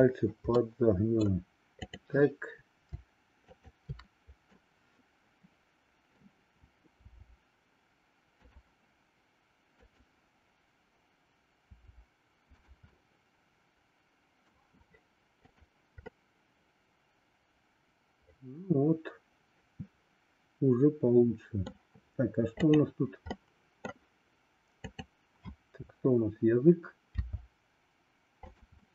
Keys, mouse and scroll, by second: 0.5-1.0 scroll up 1, 1.0 middle click, 1.7-3.0 drag, 3.5-4.9 shift+drag, 4.9-6.1 middle drag, 8.5 r, 9.8-11.2 drag, 12.9-14.6 middle drag, 16.0-21.7 middle drag, 22.5 click, 23.3 middle click, 24.9-26.2 drag, 28.8-28.9 middle drag.